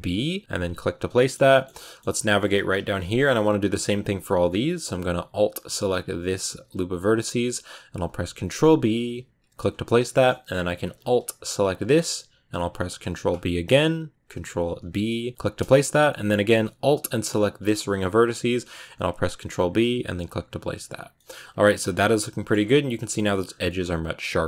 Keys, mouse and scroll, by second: 0.8 scroll down 4, 1.0-2.2 middle drag, 2.2-2.5 scroll up 3, 6.2 alt+right click, 7.0-7.9 scroll up 1, 8.1 ctrl+b, 11.4-14.5 alt+right drag, 14.5 ctrl+b, 16.0-17.3 middle drag, 17.3-18.5 alt+right drag, 18.5 ctrl+b, 20.7 Tab, 20.8 scroll down 3, 21.0 middle click, 21.2 scroll up 1, 21.3-21.8 scroll down 7, 21.8 middle click, 22.4-23.3 scroll up 7, 23.3 scroll down 4, 23.5-24.4 middle drag.